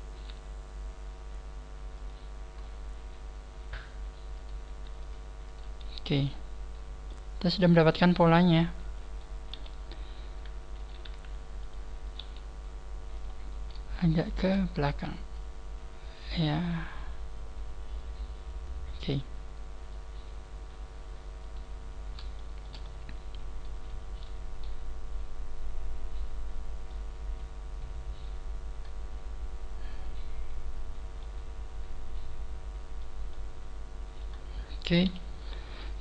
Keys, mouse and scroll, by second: 0.3 right click, 2.5-3.2 scroll down 3, 4.4 right click, 4.6 g, 5.0 click, 5.4 right click, 5.6 g, 6.1 click, 6.6-7.0 scroll down 4, 7.0 middle click, 9.5 KP_1, 9.8-10.8 scroll up 1, 10.8 right click, 10.8 scroll up 2, 11.0 g, 11.6 click, 12.0 click, 12.0 right click, 12.2 g, 14.3 shift+right click, 15.3 click, 16.9 right click, 19.9 scroll down 3, 20.4 scroll up 1, 21.4 right click, 21.4 scroll up 2, 22.4 shift+middle click, 22.8 shift+middle click, 26.8 middle click, 29.0-29.9 scroll up 1, 30.8 scroll down 2, 30.9 scroll down 1, 31.2 middle click, 32.5 middle click, 33.3 middle click, 34.4-35.0 scroll down 4, 35.0 KP_1, 35.5 scroll down 2.